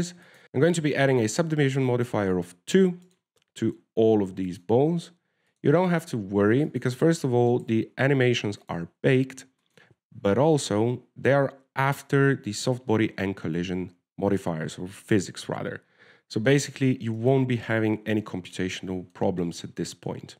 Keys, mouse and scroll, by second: 0.4 click, 0.4-0.9 scroll up 2, 1.4 w, 4.4 right click, 5.8 click, 8.0 click, 8.8 right click, 9.9 click, 18.0 middle click, 18.5 shift+right click, 18.9 shift+right click, 19.5 w.